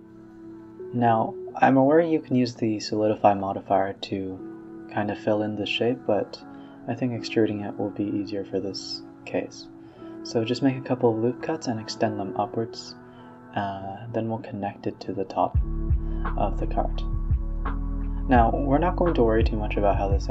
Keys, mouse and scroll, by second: 0.0 click, 0.3 click, 0.4 x, 0.8 ctrl+r, 1.9-4.5 middle drag, 4.5 ctrl+z, 5.0 a, 5.3 middle drag, 5.6-6.0 scroll down 2, 6.0 scroll up 1, 6.7 middle click, 7.0 e, 7.1 s, 7.7 middle click, 8.1 s, 9.8-11.2 middle drag, 11.2 a, 11.3 a, 11.5 ctrl+r, 12.5-13.4 middle drag, 13.8 click, 14.4 shift+click, 14.7 middle click, 15.2 a, 15.3 a, 15.8 click, 16.4 shift+click, 16.6 scroll down 1, 16.8-17.2 middle drag, 17.2 e, 18.0-19.3 middle drag, 19.3 s, 20.2 middle click.